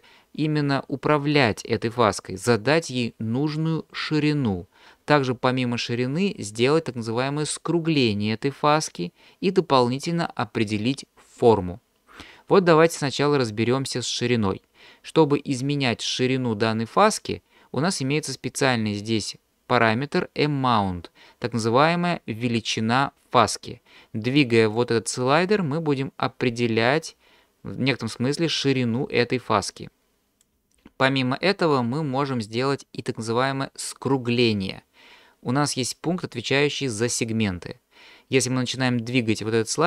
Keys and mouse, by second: 24.8-30.6 drag.